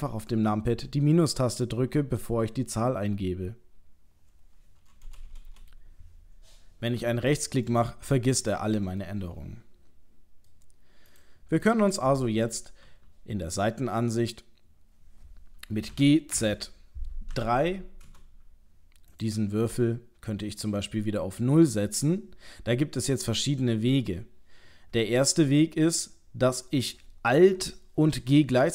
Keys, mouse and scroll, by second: 7.7 right click, 9.0 middle click, 11.1 click, 11.7 middle click, 12.9 KP_3, 13.9-14.7 scroll up 3, 15.9 g, 19.1 click.